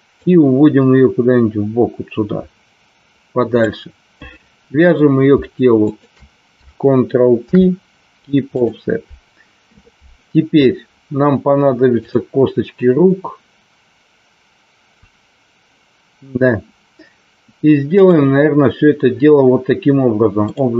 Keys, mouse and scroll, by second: 0.2-3.5 drag, 5.9 shift+click, 7.4 ctrl+p, 11.9 click, 18.0-20.7 drag.